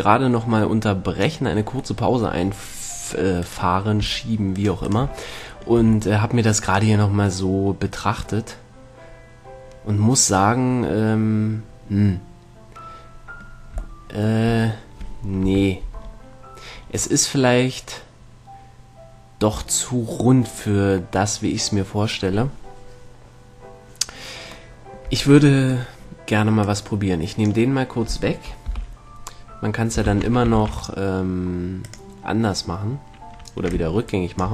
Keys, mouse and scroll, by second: 2.2-3.7 middle drag, 3.7-6.8 right drag, 6.0 a, 6.8-9.2 middle drag, 11.8-15.6 middle drag, 15.6 KP_1, 19.6 middle click, 21.6-23.5 middle drag, 25.0-26.9 middle drag, 26.9-28.6 drag, 28.9 KP_1, 30.3 shift+c, 30.8 shift+a, 34.0-34.5 drag.